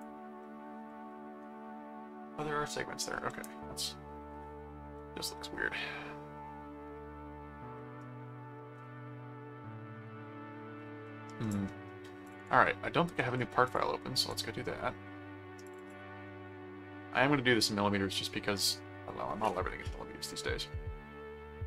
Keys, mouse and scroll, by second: 0.4 middle click, 3.3 middle click, 4.9-7.5 middle drag, 7.8-11.3 middle drag, 11.5 click, 12.3 ctrl+click, 12.5 ctrl+Tab, 13.7 click, 15.6 click.